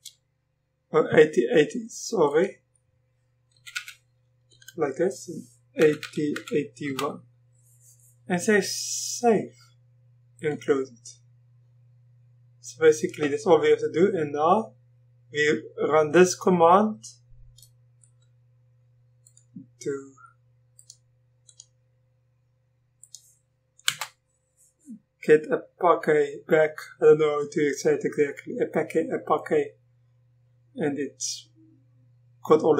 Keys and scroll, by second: 3.5 BackSpace, 3.7 0, 4.5 Down, 5.6-7.0 typing, 23.9 Return.